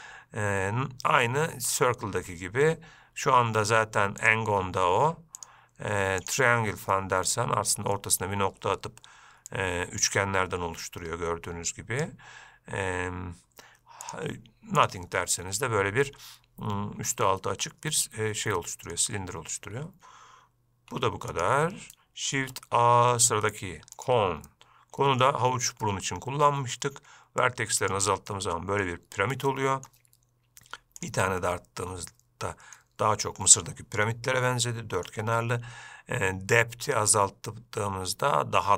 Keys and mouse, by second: 0.0-4.6 drag, 5.8-6.6 drag, 7.2-7.5 middle drag, 9.8-12.4 drag, 14.3-15.1 drag, 15.4-19.2 middle drag, 21.2 x, 22.6 shift+a, 24.8-25.5 middle drag, 26.1-26.8 shift+middle drag, 27.8 click, 28.5-29.1 middle drag, 29.7-30.1 middle drag, 31.3 drag, 31.6-33.0 middle drag, 34.9-35.3 middle drag, 37.0-38.7 drag.